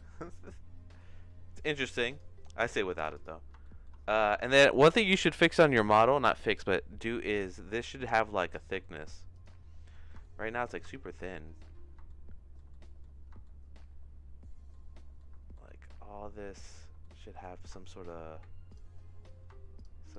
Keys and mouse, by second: 1.7 click, 3.1 click, 3.6 shift+middle click, 8.4 middle click, 8.8 shift+middle click, 9.9 middle click, 10.2 shift+middle click, 10.9 Tab, 12.0 shift+middle click, 12.7 middle click, 13.4-14.7 shift+middle drag, 15.1 shift+middle click, 15.6-16.7 shift+middle drag, 17.0 middle click, 17.8 shift+middle click, 20.0 shift+click.